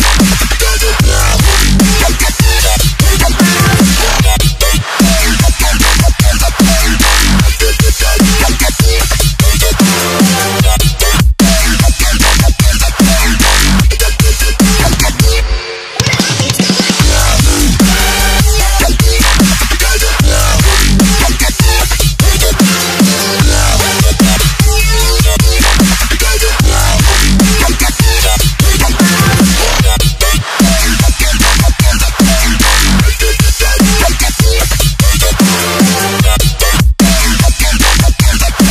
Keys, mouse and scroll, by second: 0.4 click, 1.9 ctrl+0, 3.0 click, 7.3 Return, 8.5 click, 8.9 Delete, 10.5 click.